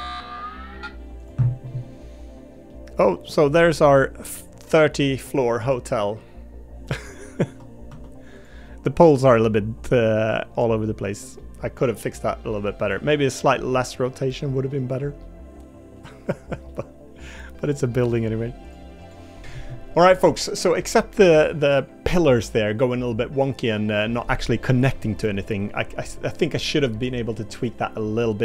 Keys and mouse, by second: 1.6 middle click, 2.7 middle click, 3.9-5.1 middle drag, 5.6 middle click, 7.4 Tab, 7.9 Tab, 8.6 middle click, 9.8 middle click, 11.4-12.8 middle drag, 13.3 middle click, 14.3 middle click, 15.2 middle click, 16.7 middle click, 18.1 middle click.